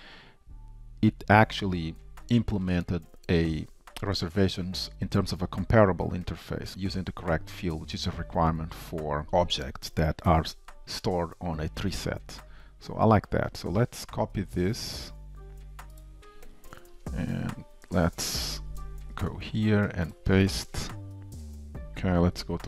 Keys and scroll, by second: 17.9 shift+super+F12, 22.5 ctrl+shift+a.